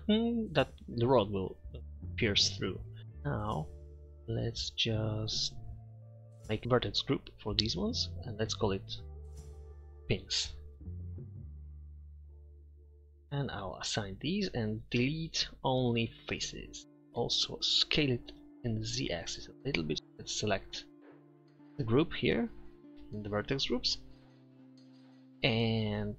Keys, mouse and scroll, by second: 0.5-1.6 middle drag, 3.0 middle click, 3.8 click, 6.3 click, 7.8-9.7 drag, 9.9 click, 15.0 Delete, 17.1 Tab, 17.1 z, 17.2 a, 18.0 s, 22.0-23.6 middle drag.